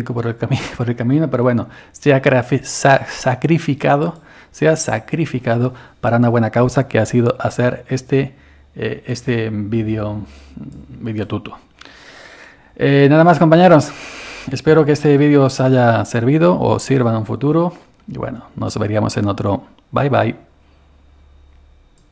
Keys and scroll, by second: 0.0-1.5 typing.